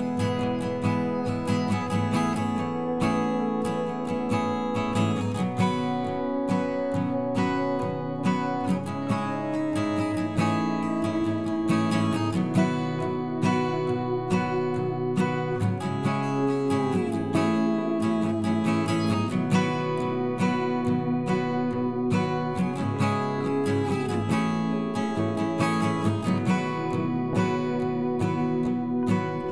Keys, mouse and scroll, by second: 0.1 ctrl+r, 1.0 ctrl+b, 3.2 e, 3.7 alt+s, 5.0 alt+s, 5.3-5.9 scroll down 1, 5.9 Tab, 6.1 scroll down 1, 6.3 middle click, 6.8 click, 7.0 scroll up 1, 7.2 scroll down 1, 7.4-9.0 middle drag, 9.3 shift+a, 11.3 KP_3, 11.9 r, 14.2 ctrl+z, 14.7 r, 16.3 s, 17.7 s, 20.0 KP_7, 20.8 scroll up 2, 21.0 shift+middle click, 21.5 g, 25.4 middle click, 25.8-27.4 scroll down 1, 27.6 KP_1, 28.0-28.8 scroll up 1, 28.8 g.